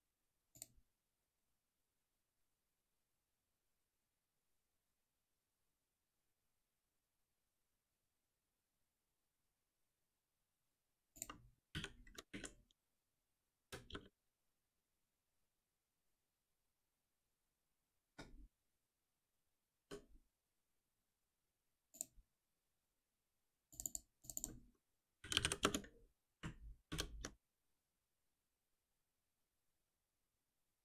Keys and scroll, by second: 11.6 ctrl+z, 11.7 ctrl+alt+p, 19.8 alt+F7, 25.6 Return, 26.8 shift+F10.